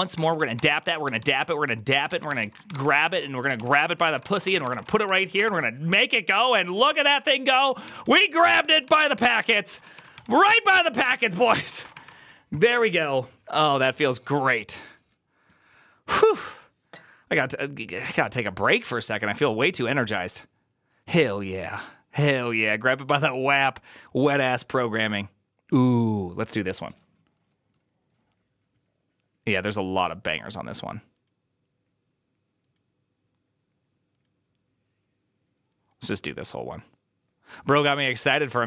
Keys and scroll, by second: 0.0-5.0 typing, 5.2 Up, 5.3 Return, 6.7 ctrl+a, 6.8 [, 7.0 ctrl+u, 7.4 shift+a, 7.7 ctrl+c, 7.8 ctrl+c, 9.4 alt++, 9.4 alt+{, 9.6-12.0 typing.